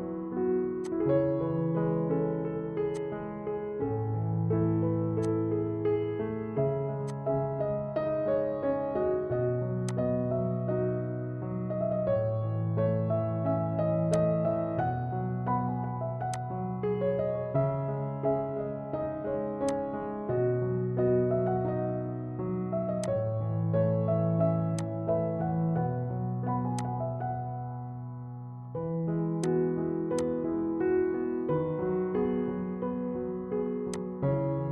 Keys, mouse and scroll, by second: 2.9-4.3 drag, 4.3 typing, 4.3 Down, 5.2-6.7 drag, 6.9 shift+Num_Lock, 6.9 click, 6.9 typing, 7.0-9.4 shift+drag, 10.1 click, 10.1 typing, 12.2 typing, 12.5 F4, 14.1 click, 16.4 click, 17.8 ctrl+v, 19.8 click, 21.1 right click, 21.1 typing, 23.1 click, 27.1 click, 29.3 typing, 29.6-32.4 drag, 32.4-32.8 scroll up 1, 34.1-34.7 drag.